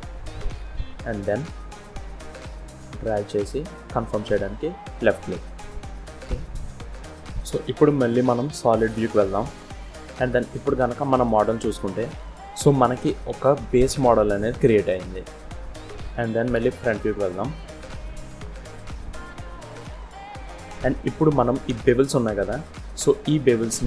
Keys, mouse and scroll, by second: 6.6-7.3 scroll down 3, 7.4 scroll up 1, 7.4-8.0 scroll down 1, 8.8 z, 10.3 scroll down 2, 10.9 middle click, 15.7-16.4 scroll up 1, 16.4 KP_1, 17.5-18.0 scroll up 2, 18.3 z.